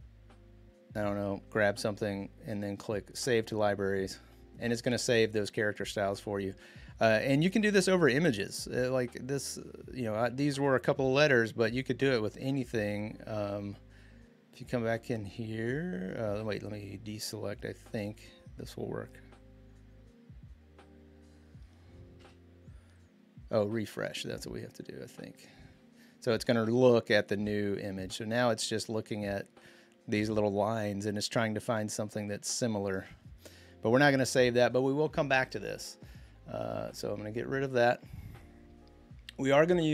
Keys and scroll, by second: 22.0 BackSpace.